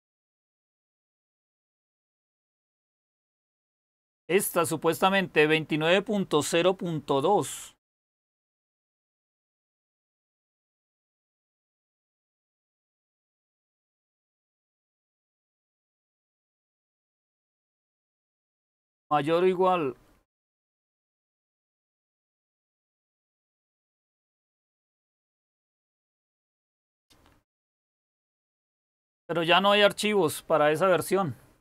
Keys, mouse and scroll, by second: 0.3-1.0 scroll down 1, 1.0-1.5 scroll down 1, 1.5-2.4 scroll down 1, 2.4-3.1 scroll down 1, 3.1-3.8 scroll down 1, 3.8-8.7 scroll down 1.